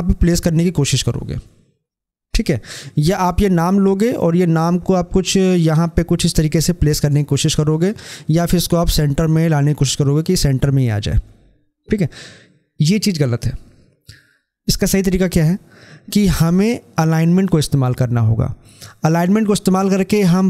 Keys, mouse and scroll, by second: 3.0-12.7 drag.